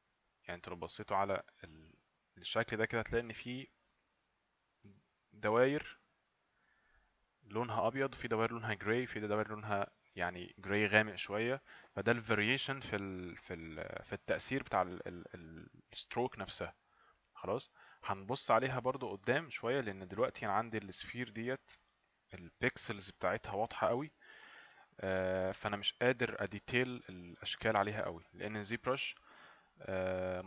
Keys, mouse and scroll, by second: 4.8 click, 7.1 click.